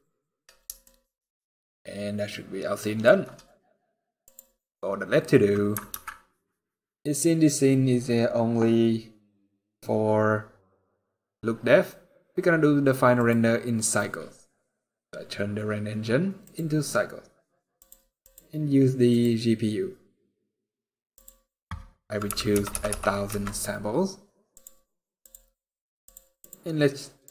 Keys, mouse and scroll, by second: 0.6 shift+middle click, 4.0 click, 7.4 ctrl+s, 10.0-10.4 scroll up 4, 11.2-11.9 scroll down 5, 11.7 scroll up 1, 12.9 click, 17.5 click, 18.0 click, 20.9 click, 22.4 KP_0, 24.2 click, 24.9 click, 25.8 click, 26.1 click.